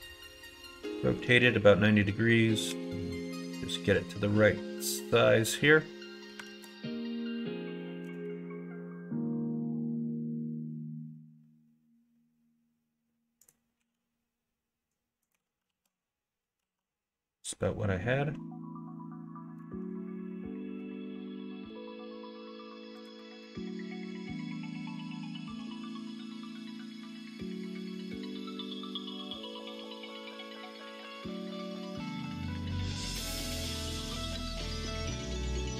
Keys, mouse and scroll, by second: 2.6 s, 6.4 alt+z, 8.0 g, 13.8 s, 15.6 alt+z, 16.6 alt+z, 19.6 e, 23.3 ctrl+z, 24.0 s, 26.5 Tab, 26.9 click, 28.0 click, 28.6 click, 32.2 click, 35.6 Tab.